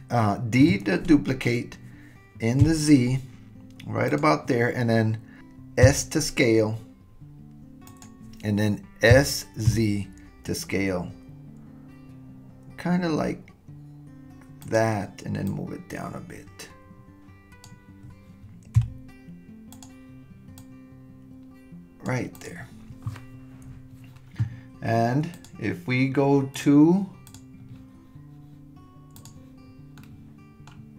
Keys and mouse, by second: 0.6 shift+d, 5.8 s, 9.1 s, 15.5 click, 18.8 s, 20.6-22.1 drag, 25.4 click, 26.6 click, 27.3 click, 29.2 drag, 30.0-30.6 middle drag.